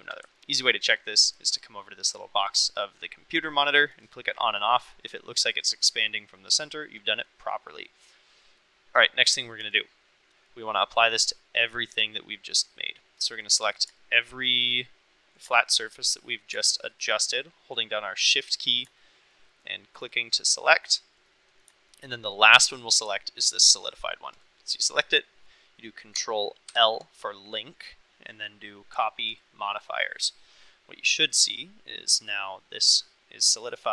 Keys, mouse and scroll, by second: 0.4-1.4 middle drag, 4.0 click, 4.3 click, 4.5 click, 4.8 click, 5.1 click, 5.3 click, 5.6 click, 5.8 click, 6.1 click, 6.4 click, 7.1 middle click, 7.9 middle drag, 8.5 middle click, 9.3 middle click, 9.7 click, 14.0-14.5 shift+middle drag, 15.6 shift+middle drag, 16.1-16.4 middle drag, 18.2-18.8 middle drag, 19.0 shift+middle click, 20.1 shift+middle click, 21.0 shift+middle click, 21.3-21.7 middle drag, 22.0 shift+middle drag, 26.7 ctrl+l, 30.7-31.4 middle drag, 33.6 middle drag.